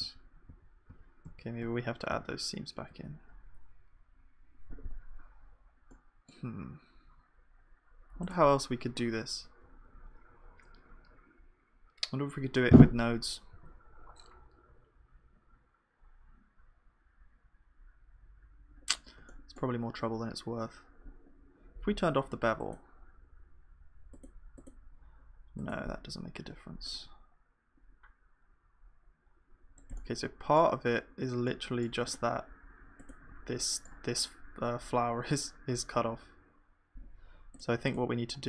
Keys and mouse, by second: 0.0-2.1 ctrl+z, 0.0 s, 5.4-13.5 middle drag, 13.5 ctrl+s.